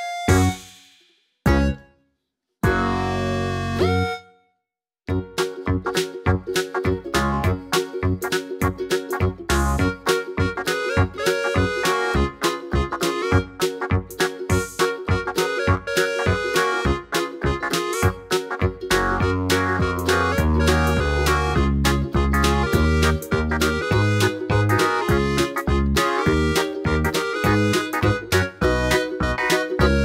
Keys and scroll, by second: 0.3 super+z, 5.0 d, 8.1 super+d, 11.8 super+d, 12.9 super+z, 14.2 BackSpace, 15.7 super+d, 23.2-27.9 typing.